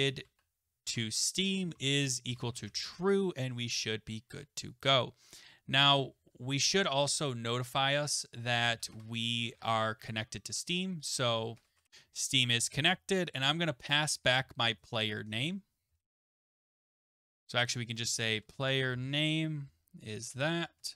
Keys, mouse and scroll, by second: 0.0-0.7 typing, 0.9 Tab, 2.0-4.7 typing, 4.3 click, 4.4 click, 4.4 click, 5.9 Return, 6.2-13.7 typing, 8.7 scroll down 3, 14.3 Left, 14.4 Left, 14.6 Left, 14.8 Right, 15.0 Right, 15.1 Right, 15.3 Right, 15.6-20.9 typing, 17.4 Right, 20.2 Left, 20.3 Left, 20.5 Left.